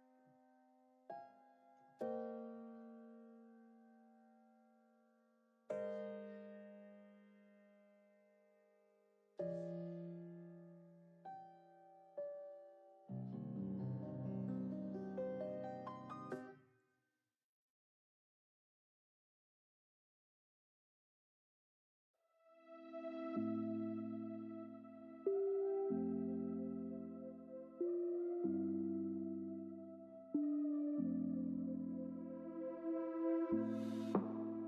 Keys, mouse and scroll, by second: 0.2 KP_3, 0.5 alt+z, 1.1 g, 2.9 g, 7.3 click, 7.4-8.1 scroll down 5, 7.6 alt+z, 7.7 click, 8.1-9.4 middle drag, 9.5 ctrl+z, 9.7 ctrl+z, 10.2 shift+click, 10.7 KP_3, 10.9-11.5 scroll up 8, 11.1 shift+middle click, 11.5 alt+z, 11.9 g, 14.2 click, 14.3 scroll down 7, 14.5 alt+z, 14.7 click, 14.8 middle click, 15.3 scroll down 3, 15.5 shift+middle click, 16.3 l, 16.8 shift+d, 17.6 r, 20.9 shift+middle click, 21.2 r, 29.4 shift+middle click, 30.0 r, 31.6 KP_3, 32.0 shift+middle click, 32.5 g, 34.1-34.5 shift+middle drag, 34.5 g.